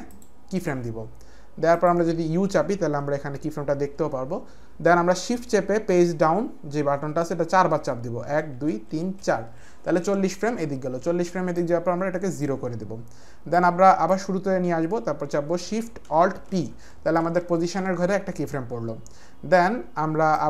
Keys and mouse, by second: 0.1 click, 1.7 click, 3.0 u, 8.2 shift+Page_Down, 8.5 shift+Page_Down, 8.9 shift+Page_Down, 9.1 shift+Page_Down, 11.5 click, 13.5 click, 16.5 alt+shift+p, 20.3 click.